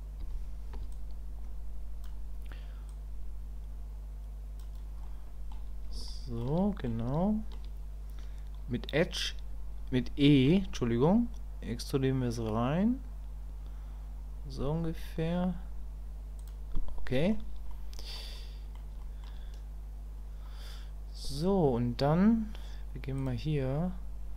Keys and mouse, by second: 5.0 middle click, 6.1 shift+click, 6.1 shift+middle click, 6.6 middle click, 7.2 shift+middle click, 16.8 middle click, 17.7 shift+middle click, 18.3 middle click, 19.0 shift+click, 23.2 click.